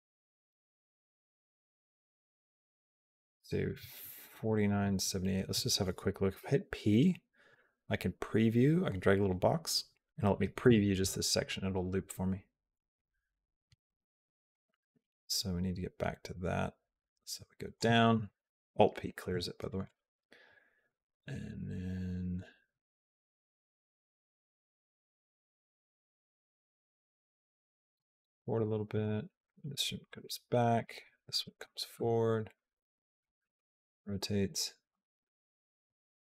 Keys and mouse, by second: 0.8 space, 1.0 click, 2.8 click, 4.3 click, 6.2 p, 10.5 space, 14.4-17.6 drag, 18.8 alt+p, 19.7 click, 20.7-27.8 drag, 28.8 click, 29.9 g, 31.2 click, 31.5 g, 33.1 r, 34.8 g.